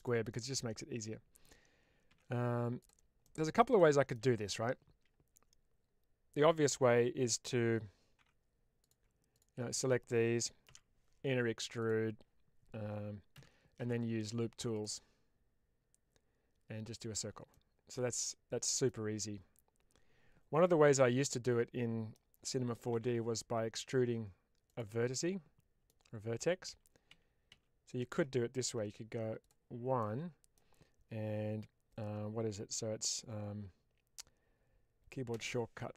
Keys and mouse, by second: 0.2-1.3 middle drag, 2.0 1, 3.1 middle click, 3.6 middle click, 8.1 3, 10.6 i, 13.2 n, 14.6 click, 16.8 click, 17.4-18.7 middle drag, 20.9-22.0 middle drag, 22.8 s, 24.6 click, 25.0 middle click, 26.6 ctrl+z, 27.0 ctrl+z, 27.4 ctrl+z, 28.7 1, 29.3 click, 30.0 middle click, 35.3 space.